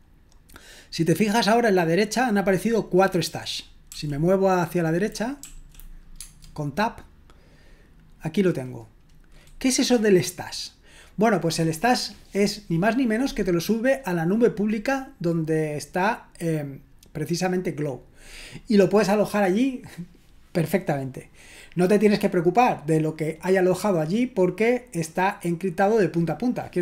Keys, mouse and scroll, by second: 3.9 l, 5.4 Right, 6.2 Tab.